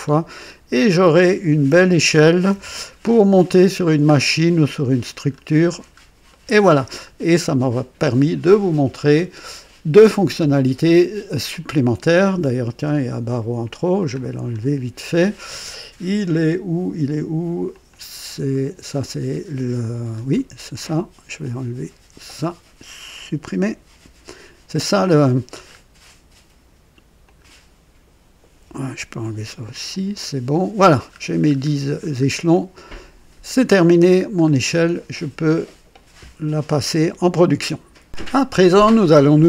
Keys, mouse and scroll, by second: 0.1-0.6 scroll down 3, 2.5 KP_0, 3.0-3.7 scroll down 3, 4.1 scroll up 1, 4.7 right click, 5.3 scroll up 1, 5.7-6.0 scroll down 1, 6.3-7.0 right drag, 7.5 right click, 14.0 click, 14.4-14.8 scroll down 1, 17.7 click, 20.3 right click, 21.4-22.4 drag, 23.9 Delete, 25.5 scroll up 1, 27.2 click, 28.6 Delete, 29.9 click, 31.1 scroll up 1, 31.5-32.3 scroll down 2, 32.5-33.6 right drag, 33.8 scroll up 1, 34.2 scroll down 1, 34.7-35.3 right drag, 38.1 click.